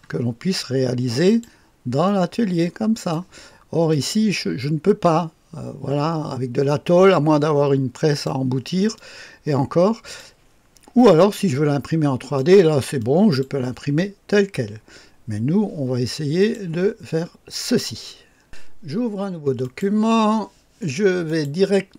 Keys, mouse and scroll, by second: 1.2 click, 2.0-3.1 drag, 3.9 click, 4.6-8.3 drag, 8.9-10.2 drag, 11.3-12.4 drag, 13.0 click, 13.7 click, 16.4 click, 18.4 click, 19.6 click, 21.2 click.